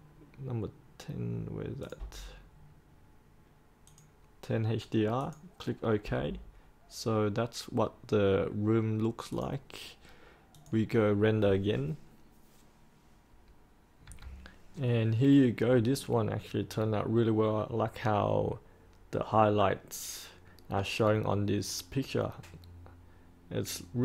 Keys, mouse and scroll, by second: 2.3-3.8 scroll down 1, 3.8 click, 13.9 3.